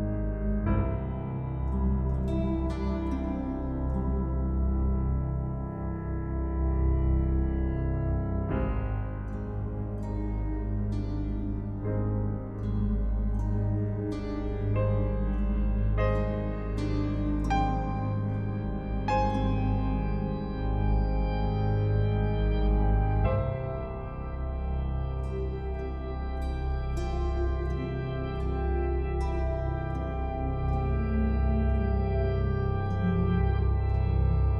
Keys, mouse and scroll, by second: 0.8-1.3 scroll down 1, 1.3 click, 8.0 click, 14.1 click, 22.1 click, 22.7-24.6 scroll up 1, 24.6 click, 26.8-27.8 scroll down 1, 28.6-29.9 typing, 32.6 click, 33.4-33.9 scroll down 1.